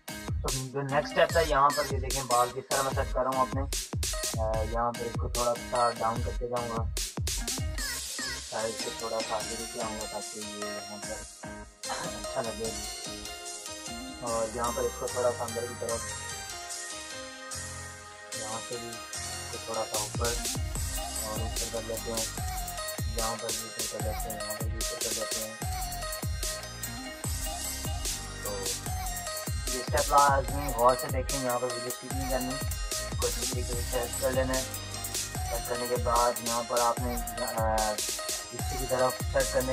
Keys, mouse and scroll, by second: 0.3 click, 0.6 space, 1.1 [, 2.4 space, 2.5 click, 3.4-5.5 typing, 3.5 click, 4.4 click, 5.8 click, 6.7-8.0 typing, 7.0 click, 8.1 click, 10.0-11.0 typing, 11.1 click, 12.4-14.8 typing, 12.5 click, 13.2 click, 14.8-17.4 drag, 17.4 ], 18.0 click, 18.3 ], 19.3 click, 20.1 space, 20.2 click, 21.9 space, 23.0 click, 24.2 space, 24.4-26.0 drag, 26.0 space, 26.2 click, 27.4-28.1 [, 28.2 click, 28.6 click, 30.6-33.4 typing, 30.7 click, 32.4 click, 33.4 click, 34.4 ctrl+-, 35.4 click, 37.5 [, 37.9 [, 38.3 click, 38.3 click, 39.5 ctrl+z.